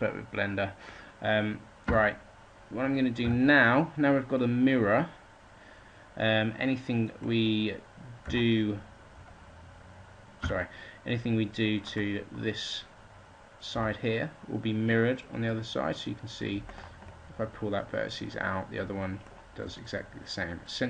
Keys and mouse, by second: 1.7 a, 3.1 a, 10.3 a, 14.8-16.0 drag, 14.8 g, 17.6-18.6 drag.